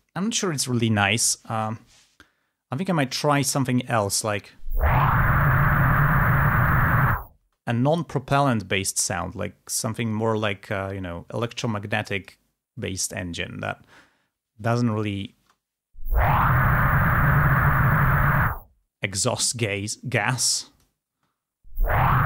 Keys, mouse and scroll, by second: 4.2 space, 7.6 space, 11.0 scroll down 2, 11.8 click, 15.5 space, 20.7 click, 21.1 space.